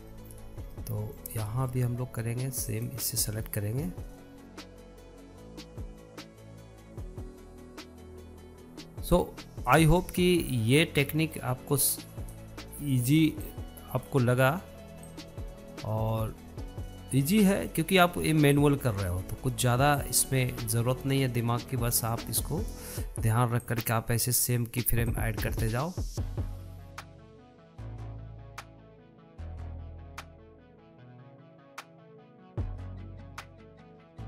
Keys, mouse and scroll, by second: 0.6 scroll up 1, 0.9-4.0 shift+middle drag, 4.0 click, 4.6 click, 5.2 scroll up 2, 5.3 middle click, 5.5 middle click, 5.7 click, 5.8 scroll up 1, 5.8 shift+middle click, 6.1 scroll down 4, 6.3 click, 6.8 click, 7.2 click, 7.6 click, 7.9 click, 8.0 scroll down 1, 8.4 click, 10.7-12.0 drag, 15.0-16.7 drag, 20.1-21.4 drag, 25.2-26.5 drag, 27.4 click, 28.0 click, 28.5 scroll down 1, 28.7 scroll up 1, 28.9 click, 29.2 middle click, 29.3-29.6 scroll up 1, 29.6 click, 30.7 click, 31.6 scroll down 2, 31.7 middle click, 32.0 click, 32.5 click, 33.8 click.